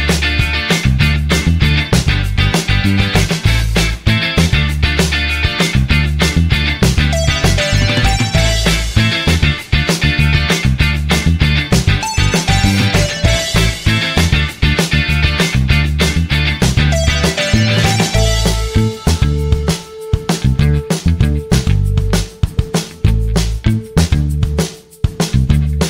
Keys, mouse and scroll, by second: 1.2 click, 2.2 ctrl+click, 3.3 click, 5.8 ctrl+click, 6.7 ctrl+click, 8.8 click, 9.5 ctrl+click, 10.5 click, 13.2 click, 15.1 click, 18.6 click, 20.7 click, 22.0 click, 22.7 click, 23.2 click, 25.1 click.